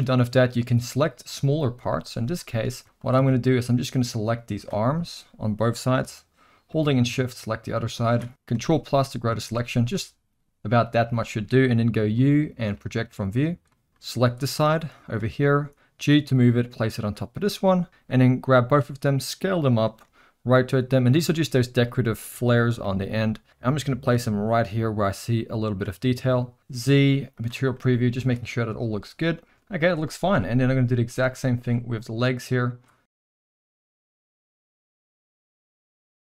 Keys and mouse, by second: 0.9 middle click, 1.8 KP_1, 2.5 shift+middle drag, 2.8 z, 3.1 alt+a, 3.5-4.6 drag, 5.1 shift+middle drag, 6.6-8.1 shift+drag, 8.3 ctrl+z, 8.5 ctrl+KP_Add, 11.1 shift+middle drag, 12.1 u, 13.7 drag, 13.9 middle click, 14.3-15.1 drag, 15.5 g, 17.4 click, 17.9 middle click, 18.7 s, 20.0 r, 21.7 s, 22.8 g, 24.1 r, 25.1 s, 26.6 z, 27.8 middle click, 28.2 alt+a, 28.6 shift+middle drag, 29.4 shift+middle click, 30.3 KP_1, 31.0 shift+middle click, 31.2 z, 32.0 click, 33.4 ctrl+KP_Add, 33.5 ctrl+KP_Subtract, 33.7 ctrl+KP_Subtract, 34.1 u, 34.8 drag, 35.1 g, 35.9 click, 36.1 click.